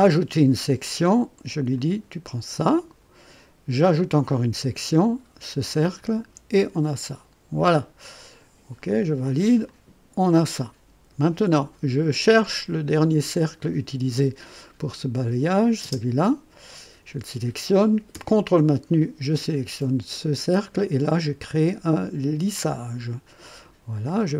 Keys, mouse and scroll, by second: 1.7 click, 3.8 click, 5.7 click, 6.9 click, 8.8 click, 9.7-11.3 drag, 12.3 click, 15.4 click, 15.8 space, 18.9 ctrl+click, 22.6 click, 24.2 click.